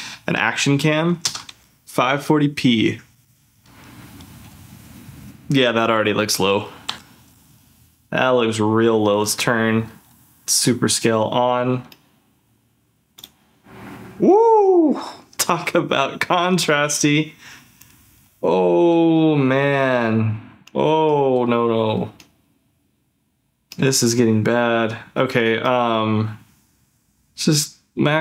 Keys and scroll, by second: 1.5 ctrl+f, 1.7 z, 2.9 ctrl+f, 6.9 ctrl+f.